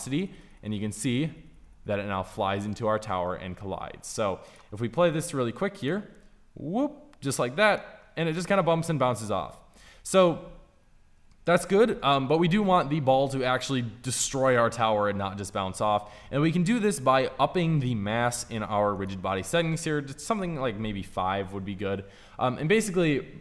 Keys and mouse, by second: 0.4 Right, 0.9 Right, 1.4 Right, 2.1 Right, 3.7 Right, 5.5-7.5 drag, 18.2-21.5 drag.